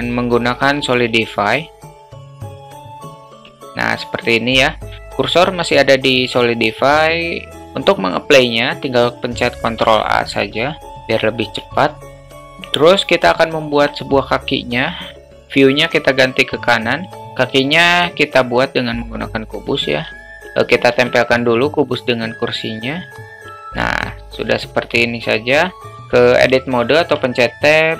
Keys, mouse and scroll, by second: 1.3 alt+middle click, 2.4 click, 3.0 click, 3.7 middle click, 9.8 ctrl+a, 10.8 alt+middle click, 11.6 alt+middle drag, 17.3 shift+a, 20.2 alt+shift+middle click, 20.4 ctrl+z, 22.0-23.5 drag, 23.3 ctrl+z, 24.0-24.4 middle drag, 26.0 alt+shift+middle drag, 27.0 Tab.